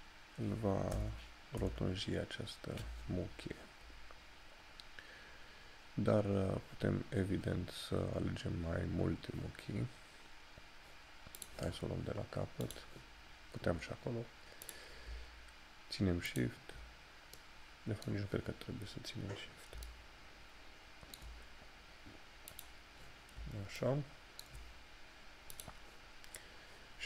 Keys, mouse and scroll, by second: 22.6 click.